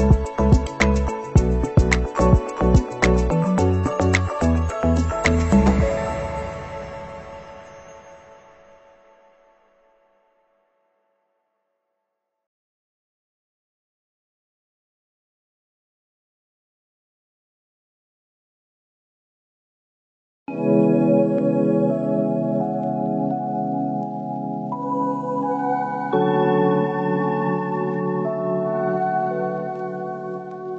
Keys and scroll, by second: 2.9 ctrl+=, 9.4 Up, 10.3 Left, 10.9 Up, 11.6 Down, 12.1 Left, 12.8 Up.